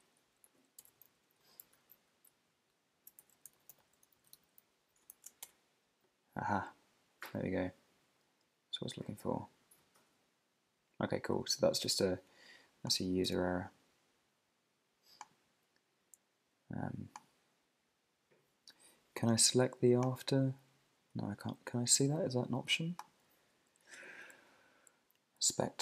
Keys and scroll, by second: 0.4 Right, 1.8 alt+Left, 2.4 alt+shift+Left, 2.9 Left, 3.2 alt+shift+Right, 5.4 Return, 20.6 Up.